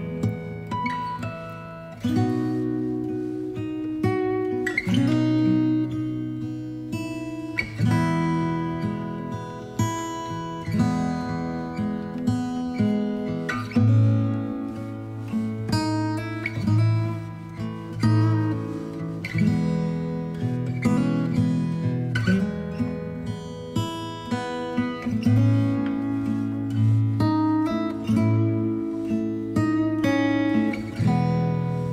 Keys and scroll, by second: 9.0 Down, 10.4 Down, 11.2 Down.